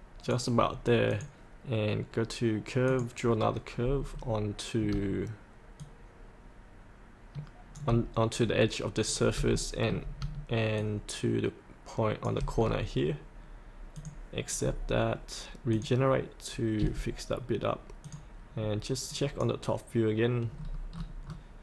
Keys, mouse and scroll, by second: 1.7 click, 4.1-4.9 scroll down 1, 5.8-7.8 shift+drag, 8.3-9.1 scroll down 1, 9.1 scroll up 1, 9.5 shift+middle click, 10.7 shift+click, 12.6-13.9 scroll up 1, 13.9 click, 14.5-15.7 scroll up 1, 15.7 click, 18.5-19.0 scroll down 1, 19.0 click, 20.4-20.9 scroll down 1, 21.0-21.6 scroll down 2.